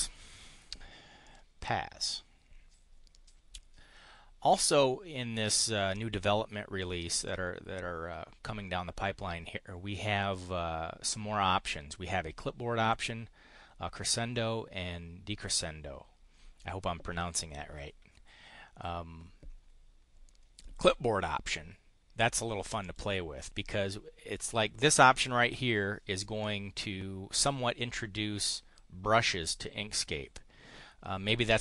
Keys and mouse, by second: 1.2 click, 7.2 click, 22.8 click.